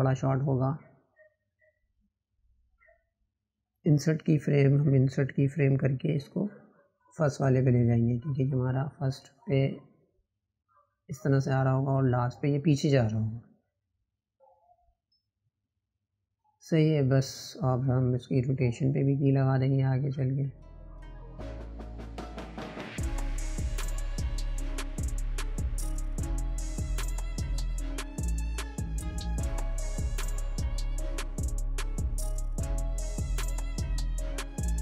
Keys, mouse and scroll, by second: 13.4 click, 17.0-17.9 drag, 17.9-18.5 shift+middle drag, 18.5 scroll down 3, 19.7-22.2 drag, 22.2-23.5 right drag, 23.5 click, 25.3 click, 28.9-31.4 right drag, 31.4 click, 32.0 click, 34.5-34.8 drag.